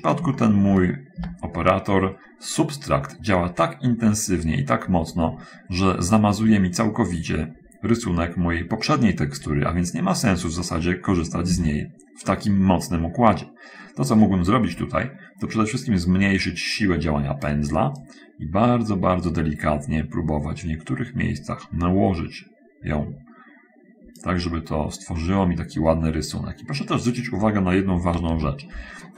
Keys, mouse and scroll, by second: 0.5 shift+middle click, 1.5 shift+7, 6.1-9.9 drag, 11.8 ctrl+z, 13.5 middle click, 15.1 middle click, 16.2-17.9 drag, 18.2-24.4 drag, 25.5-27.1 middle drag, 28.6 7.